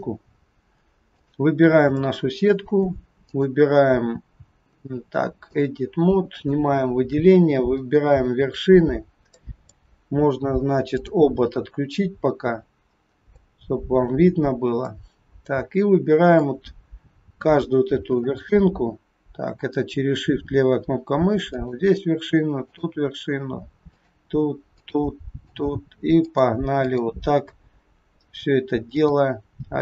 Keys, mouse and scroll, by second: 0.3-0.6 scroll up 2, 1.1 click, 1.9 shift+middle click, 3.3 click, 6.4 click, 6.9-7.7 scroll up 4, 8.9-9.3 scroll up 2, 9.6 middle click, 11.0 click, 11.5-12.0 scroll down 4, 12.3-13.4 scroll down 5, 13.4 shift+middle click, 14.3-14.9 scroll up 4, 14.9 middle click, 16.8-17.3 scroll down 1, 21.4 shift+click, 22.7 shift+click, 23.9 shift+click, 24.7 shift+click, 25.4 shift+click, 26.2 shift+click, 26.8 shift+click, 28.9 shift+click.